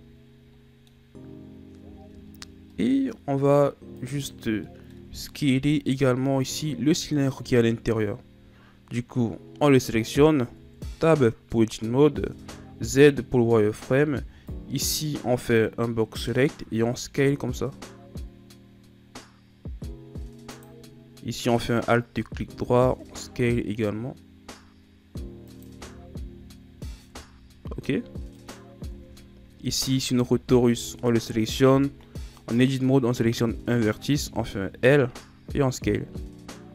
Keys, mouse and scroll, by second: 2.0-2.3 scroll down 4, 2.3-2.7 scroll up 4, 2.7-4.0 middle drag, 4.0 right click, 4.7 middle click, 5.6 KP_1, 6.9-7.6 ctrl+scroll down 4, 7.6-10.3 shift+scroll up 4, 10.5 Tab, 12.3 z, 13.7 right click, 14.0 b, 16.7 s, 21.8 alt+right click, 22.6 s, 25.8 z, 27.1 Tab, 28.4 right click, 29.0 Tab, 29.6 a, 30.2 Tab, 30.8 Tab, 32.4 right click, 34.3 l, 35.5 s.